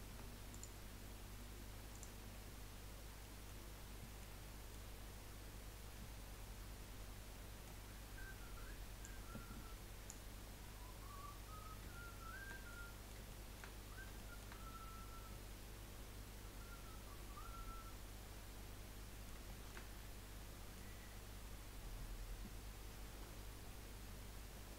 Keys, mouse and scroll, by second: 0.2 Tab, 0.5 click, 2.0 click, 2.4-2.9 scroll down 2, 2.9-3.2 scroll down 5, 3.2-3.6 middle drag, 3.6-4.1 scroll up 1, 4.1-6.9 shift+middle drag, 6.9-7.3 scroll down 1, 7.3-9.2 middle drag, 9.2-10.4 drag, 10.4-11.2 scroll up 2, 11.2 scroll up 2, 12.0-14.7 shift+middle drag, 14.7 scroll up 1, 15.4-18.5 middle drag, 19.5-23.1 shift+middle drag.